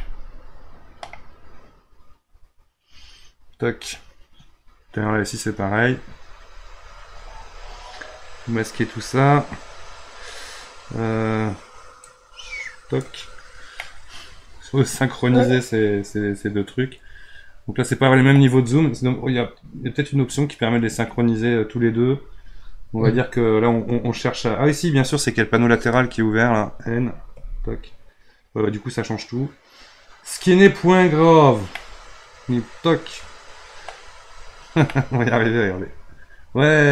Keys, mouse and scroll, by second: 1.1 scroll down 1, 1.4-2.3 scroll up 2, 2.3-3.1 scroll up 3, 3.1-6.1 scroll down 1, 6.1 scroll down 1, 10.3-10.9 scroll down 1, 10.9-12.0 scroll up 1, 12.0-13.8 drag, 13.8-16.9 middle drag, 19.6-20.2 scroll down 2, 20.2-20.7 scroll up 1, 20.7-21.1 scroll up 1, 27.3 n, 31.0 scroll up 2, 31.7-34.4 middle drag, 34.4-34.9 scroll up 1, 34.9-36.9 middle drag.